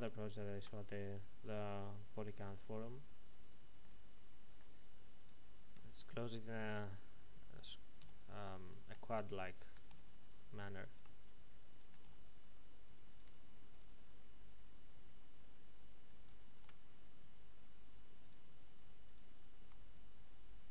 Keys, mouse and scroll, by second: 0.0 ctrl+z, 3.8 middle click, 5.2 right click, 6.2 shift+right click, 8.0 f, 8.6 right click, 9.3 shift+right click, 9.9 f, 10.8 right click, 11.7 shift+right click, 12.0 f, 13.1 right click, 14.3 f, 16.4 ctrl+r, 16.9 click, 18.2 right click, 19.0 ctrl+right click, 20.4 click.